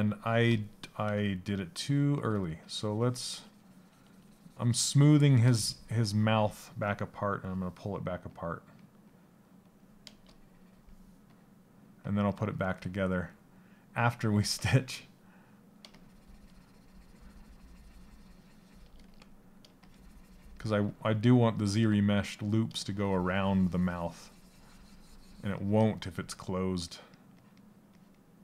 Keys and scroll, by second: 12.2 s, 20.3 s.